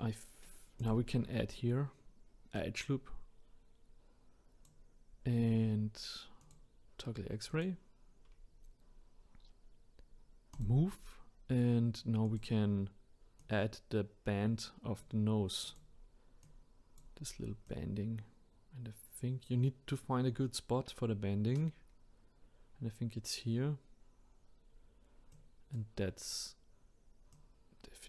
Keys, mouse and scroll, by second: 0.8-5.5 drag, 6.4-7.6 drag, 8.3-8.9 scroll up 5, 10.5-12.3 drag, 13.4 click, 15.6 click, 16.4-17.7 drag, 24.6-25.3 scroll down 1, 25.3 click, 26.2-27.3 scroll down 1, 27.3 click.